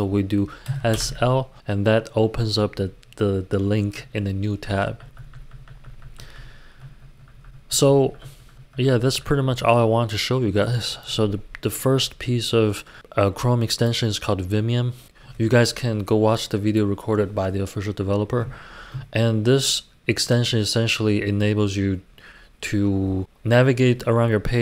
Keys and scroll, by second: 0.6 typing, 2.4 typing, 3.8-5.0 typing, 6.7-7.6 typing.